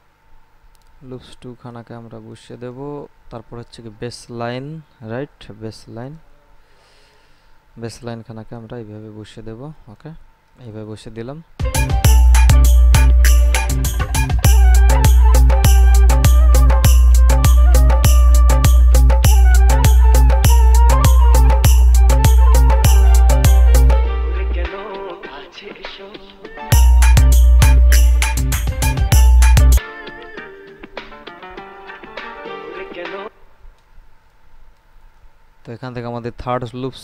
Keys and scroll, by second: 11.8 space, 33.4 space.